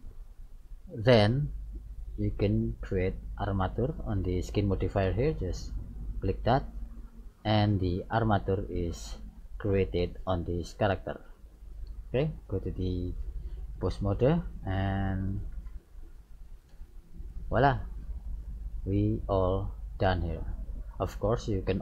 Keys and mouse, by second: 1.0 middle click, 6.2-8.1 drag, 8.1 middle click, 12.4-14.2 drag, 15.6 right click, 16.7 r, 21.3-21.8 middle drag.